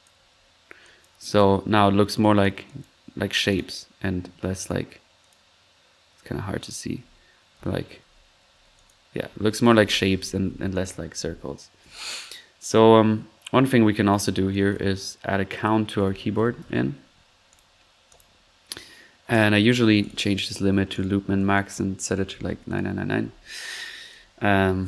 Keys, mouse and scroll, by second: 0.2 typing, 1.6 typing, 7.5 middle click, 8.0-11.1 typing, 8.7 click, 10.7 click, 12.1-12.7 middle drag, 13.5 right click, 14.0 typing, 14.1 right click, 14.2-15.1 drag, 14.8 middle click, 15.5-17.0 typing, 17.5 click, 18.1-18.5 drag, 19.3 drag, 20.0 click, 20.9 drag, 21.3 click, 24.0 click, 24.4-24.8 typing.